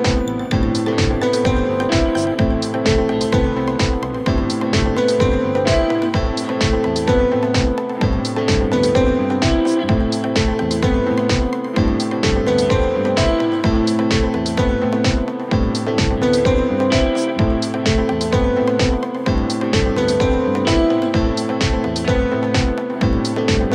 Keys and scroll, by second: 0.0-2.6 typing, 17.3-18.6 typing, 19.7 typing, 20.7 Return.